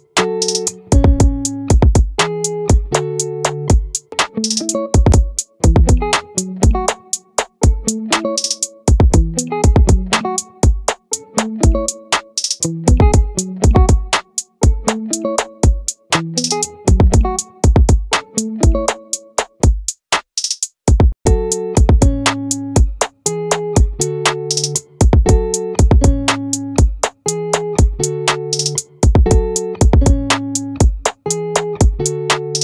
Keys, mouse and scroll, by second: 1.7-2.8 right drag, 5.4-6.9 right drag, 8.4-9.5 drag, 10.2-11.9 right drag, 11.9 click, 13.7-15.3 right drag, 15.2 click, 17.4 middle click, 17.7 z, 20.1-21.6 right drag, 22.1 middle click, 23.9 right click, 24.5 click, 27.0-28.7 middle drag, 28.7 click, 29.9-30.9 middle drag, 30.9 right click, 31.4 middle click, 32.2 right click, 32.3 middle click.